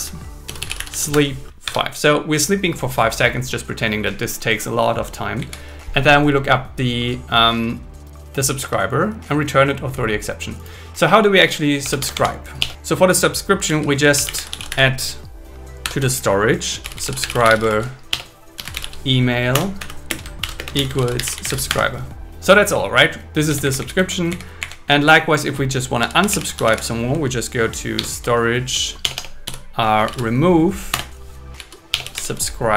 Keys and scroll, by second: 0.0 Return, 0.7 Return, 5.4 Down, 8.5 super+s, 11.8 Tab, 12.6 BackSpace, 15.8 alt+5, 18.1 BackSpace, 19.5 Return, 19.8 Right, 20.1 space, 20.4 shift+0, 20.6 space, 21.7 Escape, 23.6 Down, 24.6 Up, 25.0 End, 28.0 alt+6, 29.0 BackSpace, 30.9 Return, 31.9 Delete.